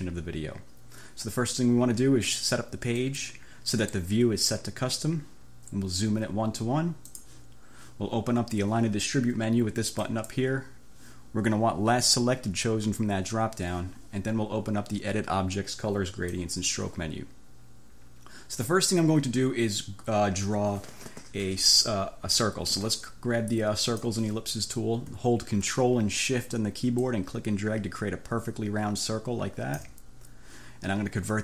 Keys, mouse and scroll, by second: 3.1 click, 7.1 click, 10.1 click, 16.3 click, 24.0 click, 27.0-30.1 ctrl+shift+drag.